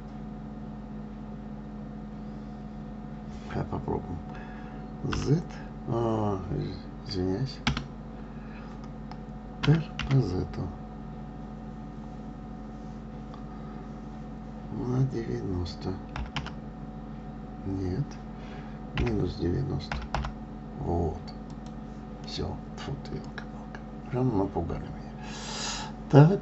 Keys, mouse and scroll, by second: 22.6-25.7 middle drag.